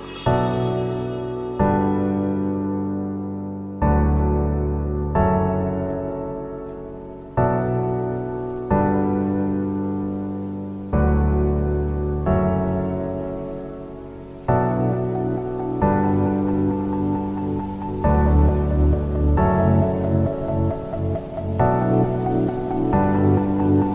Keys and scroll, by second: 5.5 ctrl+z, 9.4 space, 11.1 space, 13.7 space, 15.1 ctrl+g.